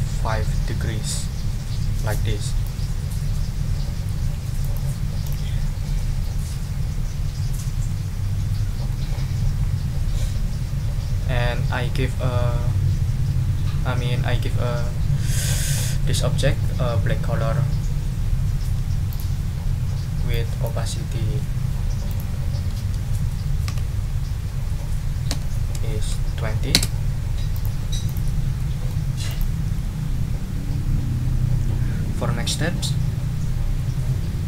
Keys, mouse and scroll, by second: 4.6 ctrl+click, 5.2 click, 7.9-9.1 drag, 9.6 ctrl+scroll up 2, 19.1 click, 20.3 click, 20.6 scroll up 2, 22.1 scroll up 2, 23.5 ctrl+a, 23.6 2, 25.3 0, 26.7 Return, 27.5 click, 28.0 click, 28.6 middle click, 29.3 click.